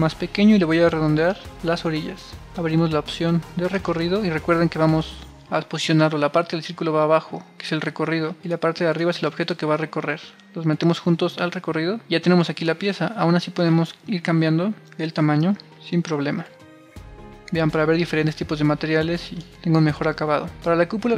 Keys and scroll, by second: 15.4 super+r, 16.9 super+r.